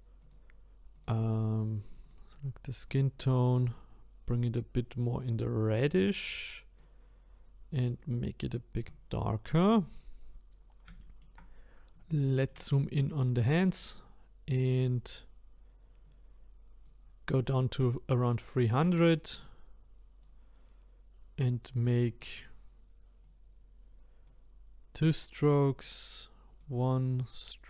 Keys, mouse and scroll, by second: 2.9 click, 9.8 click, 10.5-11.0 scroll up 5, 11.0 shift+middle click, 11.4-12.1 scroll up 1, 12.1 shift+middle click, 13.0-13.7 scroll up 3, 13.7-14.3 scroll down 1, 14.3-16.0 scroll down 1, 16.0-22.2 drag, 23.2-27.6 drag.